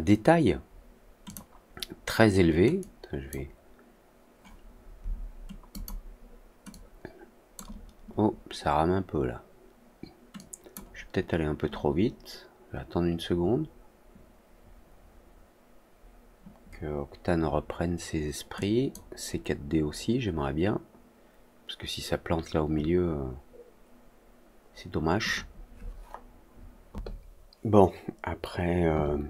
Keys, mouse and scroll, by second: 1.2 click, 2.7 click, 5.6 click, 6.6 click, 10.3-10.7 drag, 18.5 click.